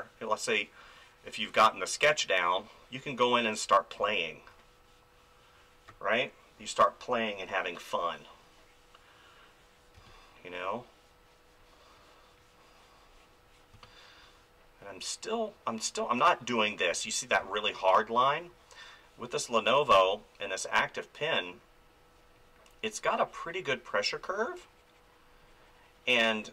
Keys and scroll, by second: 3.7 space, 9.9 space, 13.7 space, 16.9 ctrl+z, 17.4 space, 19.9 space.